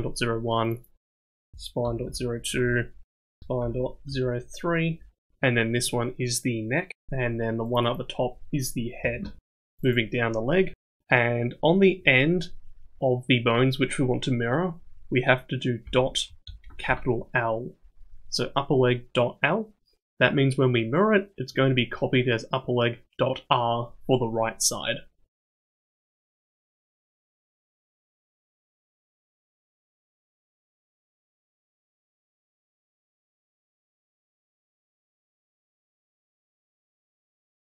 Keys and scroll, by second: 9.9 p, 29.8 o, 36.0 p.